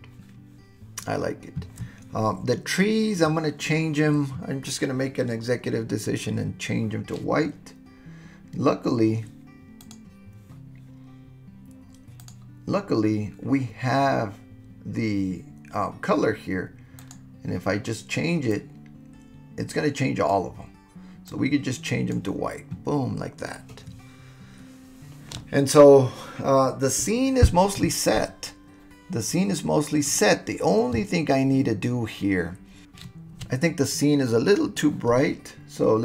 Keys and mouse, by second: 9.8 click, 12.2 click, 17.0 click.